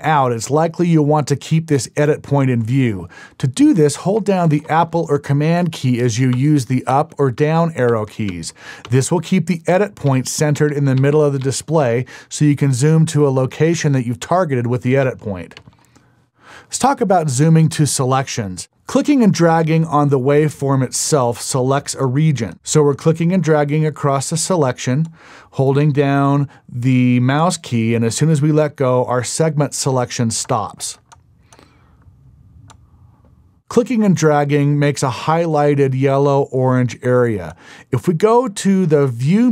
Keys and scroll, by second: 6.5 super+Down, 7.1 super+Down, 7.6 super+Down, 10.3 super+Up, 10.8 super+Up, 11.2 super+Up, 11.6 super+Up, 12.0 super+Up, 13.4 super+Down, 14.4 super+Down, 15.7 super+Up.